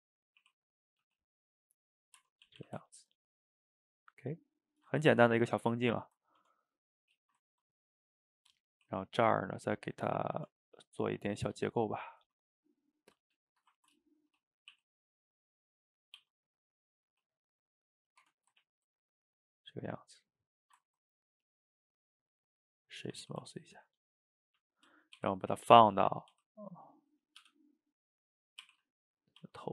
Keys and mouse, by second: 0.5 r, 1.1 g, 1.9 middle drag, 2.2 Tab, 2.5 a, 2.6 a, 2.8-4.7 ctrl+middle drag, 4.7 shift+right click, 5.0-5.5 ctrl+middle drag, 5.5 click, 5.9 shift+right click, 6.1 ctrl+middle click, 6.4 Tab, 6.9 middle click, 7.3 shift+right click, 7.5-8.7 ctrl+middle drag, 8.7 ctrl+r, 10.4 Tab, 10.9 click, 11.7 shift+click, 12.1 shift+drag, 12.3-13.5 middle drag, 13.5 shift+right click, 13.8-14.8 ctrl+shift+middle drag, 14.8 e, 18.3 Tab, 18.6-20.7 ctrl+middle drag, 20.7 shift+right click, 20.8-21.2 ctrl+middle drag, 21.2 drag, 21.5 click, 21.9-23.1 right drag, 23.1 a, 23.3 a, 23.5-24.0 ctrl+middle drag, 24.0 click, 24.2-25.2 middle drag, 25.2 r, 26.4 s, 28.7 r, 29.4 s.